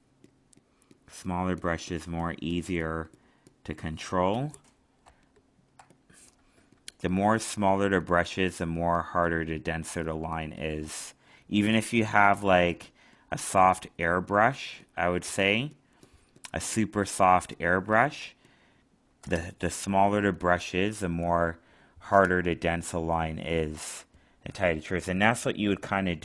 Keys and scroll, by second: 5.0 alt+space, 10.8 alt+space, 18.2 alt+space.